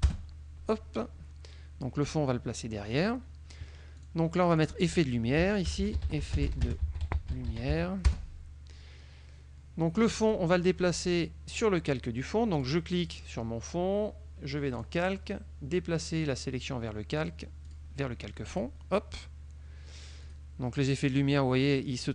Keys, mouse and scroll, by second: 0.0-0.3 typing, 3.0 click, 4.1 click, 4.6 click, 5.3-8.1 typing, 8.1 Return, 10.3 click, 12.7 click, 13.1 click, 14.9 click, 16.7 click, 17.7 click, 18.6 click, 20.3 click, 20.9 click, 21.9 click.